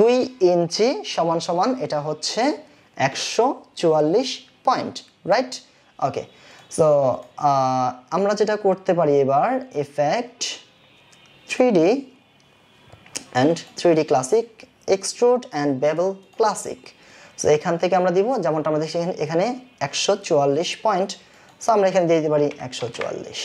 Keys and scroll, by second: 22.7 KP_1, 22.9 KP_4.